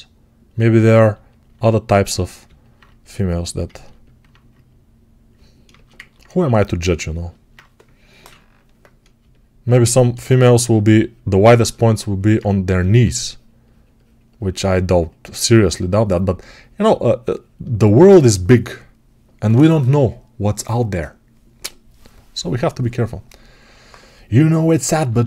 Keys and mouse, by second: 8.0 6, 12.9 3.